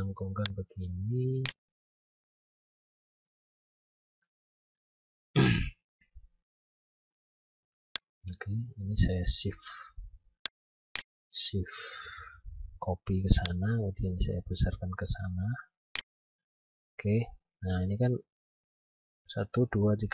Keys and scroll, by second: 3.5 F9.